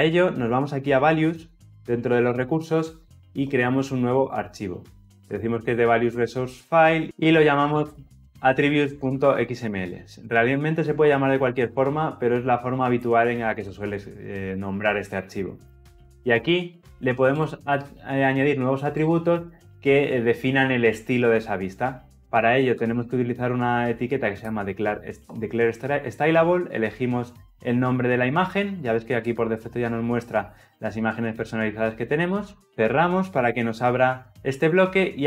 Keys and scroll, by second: 2.2 alt+Insert, 24.1 Return.